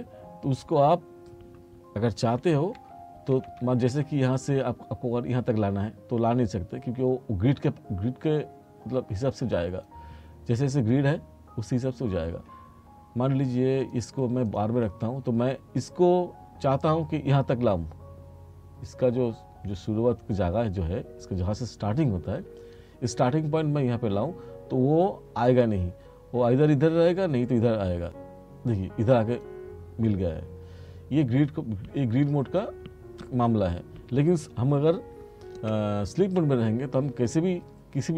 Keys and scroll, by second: 2.5 t, 35.6 F2.